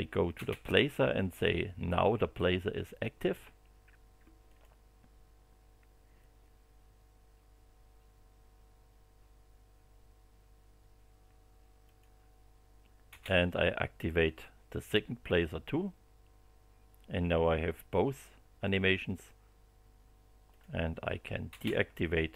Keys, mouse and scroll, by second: 0.3 space, 4.4 click, 11.8 click, 13.1 space, 20.5 click, 21.5 space.